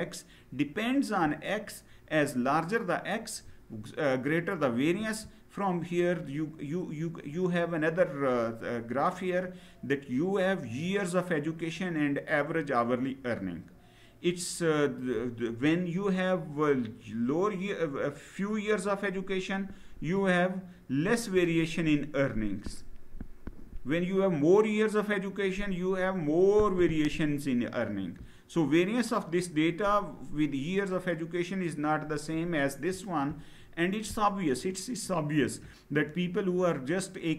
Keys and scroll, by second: 4.7 Down.